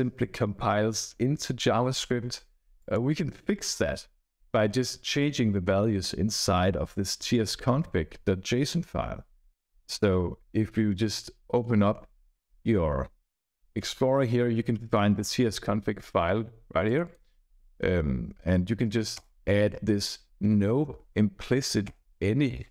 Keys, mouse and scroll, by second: 2.7 click, 11.9 alt+1, 16.8 click, 19.1 Return, 19.6-21.5 typing, 21.8 Return.